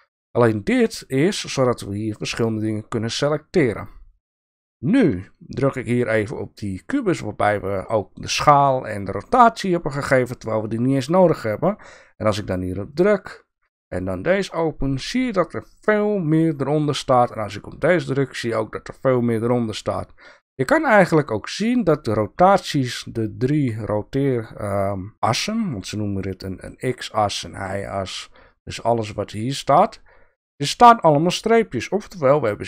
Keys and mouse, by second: 14.4 click, 17.2 click, 18.2-20.0 drag.